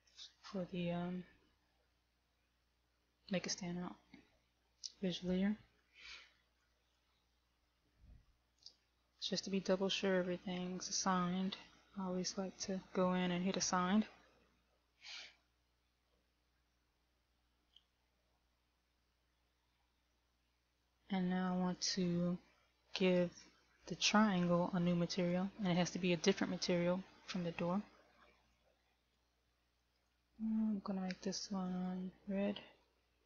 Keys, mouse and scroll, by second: 7.0 click, 9.8 Tab, 10.8 a, 12.7 a, 13.8 click, 17.0 Tab, 21.2 middle click, 24.9 right click, 25.6 click, 28.8 click, 30.2 click.